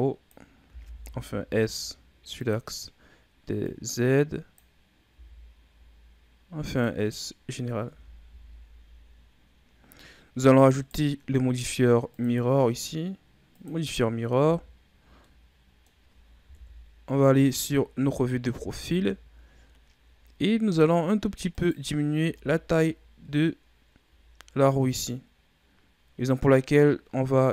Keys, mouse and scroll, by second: 0.5 s, 3.5-5.0 drag, 5.0 s, 7.4-7.8 scroll down 4, 7.8 Tab, 8.2 a, 8.4-9.7 scroll down 5, 9.7-10.7 scroll up 8, 10.7 right click, 12.0-14.3 drag, 14.3 a, 14.6 scroll down 4, 15.2-16.4 middle drag, 16.4 KP_3, 17.5-18.4 ctrl+scroll up 6, 18.4 z, 19.6-20.0 ctrl+scroll up 2, 21.5 right click, 22.1 Tab, 24.1-25.7 ctrl+scroll up 3, 26.6-27.2 scroll down 1, 27.2 middle click.